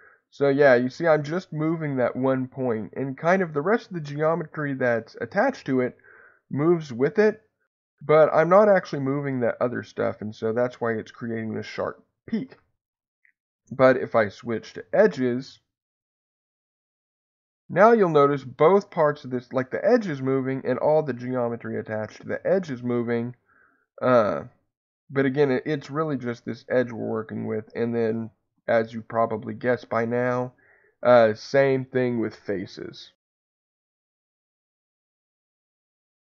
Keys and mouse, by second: 12.5 Escape, 15.0 2, 16.1 click, 17.5-27.3 drag, 27.2 Escape, 28.4 3, 31.1-36.2 drag.